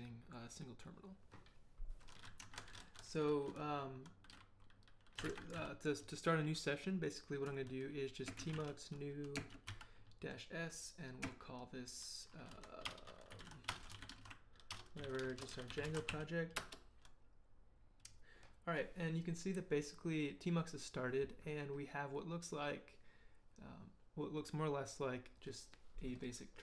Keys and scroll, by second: 4.9-6.0 typing, 8.1-10.2 typing, 11.2 space, 12.5-16.6 typing.